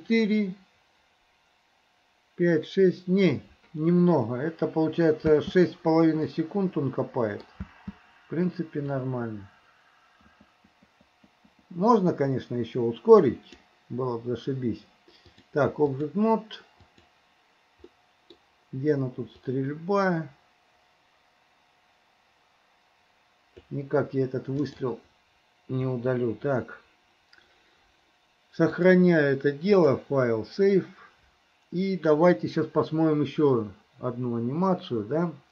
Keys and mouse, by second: 5.4 space, 6.5 middle click, 7.2 click, 7.7 space, 9.0-13.8 drag, 15.3-17.3 drag, 18.0 middle click, 19.5-23.8 drag, 24.7 click, 26.0 Delete, 28.8-33.2 drag.